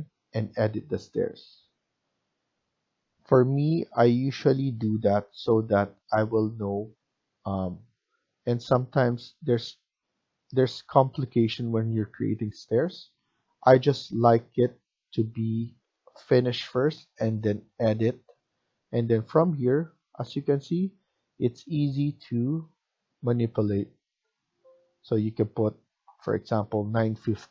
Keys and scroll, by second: 26.7-27.5 typing.